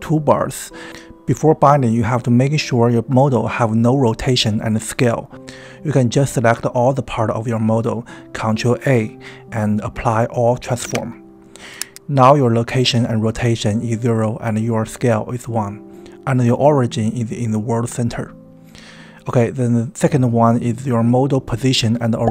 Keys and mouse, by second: 9.4-9.9 drag, 10.9 ctrl+a, 12.9 click, 13.9 c, 15.2 click, 18.4 click.